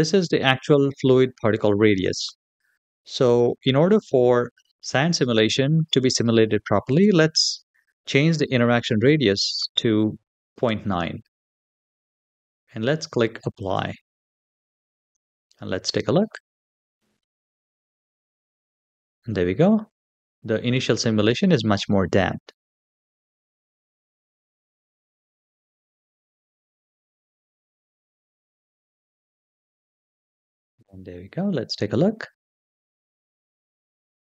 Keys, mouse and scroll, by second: 6.7-10.4 drag, 13.4 click, 16.1 click, 25.8 middle click, 26.3 shift+middle click, 26.8 scroll up 2, 27.4 click, 27.9-28.7 scroll down 3.